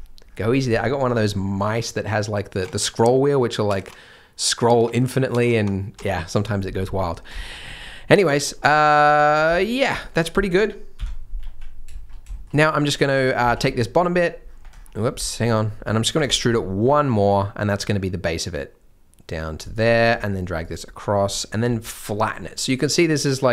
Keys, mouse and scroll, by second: 0.7 shift+middle click, 2.6 scroll up 1, 3.9 scroll up 1, 4.1-4.9 scroll down 1, 4.9 scroll up 1, 5.5 scroll down 1, 5.7-6.0 scroll up 1, 8.6 shift+middle click, 9.9 scroll down 1, 10.0 middle click, 11.4 z, 11.9 shift+scroll, 12.3 shift+middle click, 12.5 scroll up 1, 13.5 alt+a, 13.6 c, 14.7 scroll down 1, 15.1 c, 16.2 scroll up 1, 16.8 e, 20.0 g.